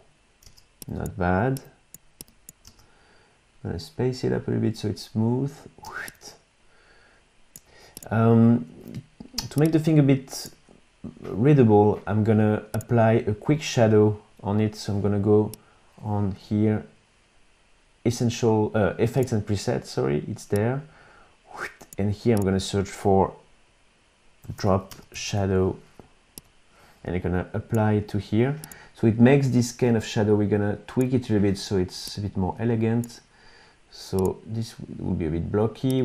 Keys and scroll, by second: 0.5 space, 2.7 space, 5.8 space, 24.2-25.7 typing.